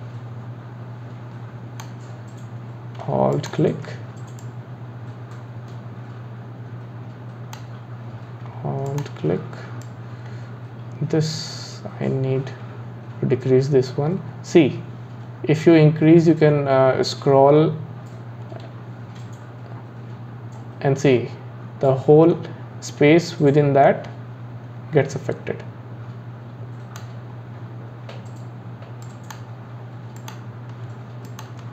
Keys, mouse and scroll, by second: 3.3 alt+click, 4.4 click, 8.9 alt+click, 9.8 click, 29.0 click, 30.2 click, 31.3 alt+click.